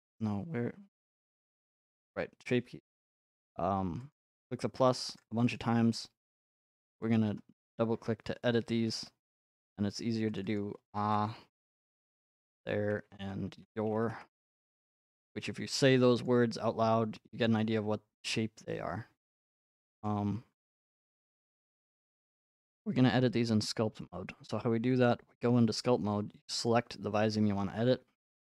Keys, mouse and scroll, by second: 4.1 click, 5.0 click, 5.6 click, 7.0 click, 7.1 click, 8.8 a, 9.0 h, 9.3 Return, 10.4 click, 10.6 click, 11.1-11.8 typing, 12.4 click, 12.5 click, 13.2 ctrl+a, 13.5-14.3 typing, 16.3-18.4 drag, 20.0-24.6 middle drag, 24.6 ctrl+Tab, 26.7-28.4 drag.